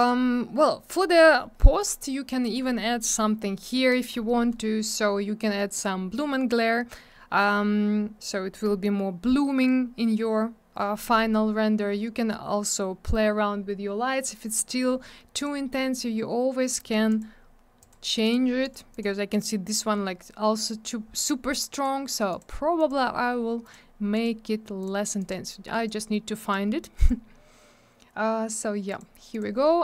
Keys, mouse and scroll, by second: 0.0 click, 0.0 click, 5.7 click, 5.8 click, 15.4 click, 15.4 click, 16.7 click, 16.7 click, 17.1 click, 17.2 double click, 17.8 click, 17.9 click, 18.2 click, 18.3 double click, 18.6 click, 18.7 click, 18.9 click, 19.0 double click, 20.5 click, 20.6 click, 21.2 click, 21.3 click, 21.7 click, 21.8 click, 22.3 click, 22.4 click, 22.8 click, 22.9 click, 23.6 click, 23.7 click, 24.1 click, 24.2 click, 24.8 click, 25.2 click, 25.3 click, 25.9 click, 25.9 click, 26.4 click, 26.5 click, 27.0 click, 27.1 click, 28.9 click, 29.0 click, 29.3 click, 29.4 double click.